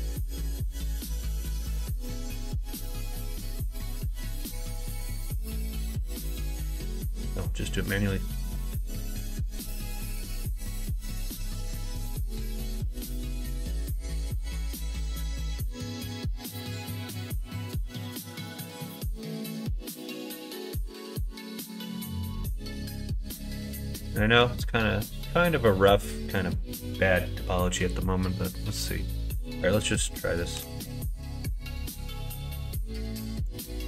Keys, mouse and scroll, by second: 1.3 click, 2.0 ctrl+z, 4.1 click, 4.8 ctrl+z, 5.4 click, 6.1 ctrl+z, 8.0 middle click, 8.8 3, 9.5 click, 10.3 click, 12.1 click, 12.8-14.8 middle drag, 15.8 r, 18.8 middle click, 19.8 click, 22.0 r, 24.5-25.6 middle drag, 28.2 middle click, 28.9 middle click, 29.3 middle click, 30.0 middle click, 30.5 x, 32.8 x.